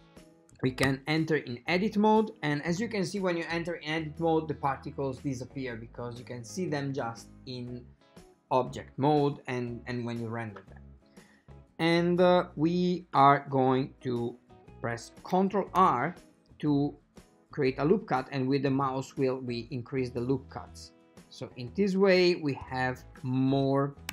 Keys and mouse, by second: 0.9 Tab, 15.9 ctrl+r.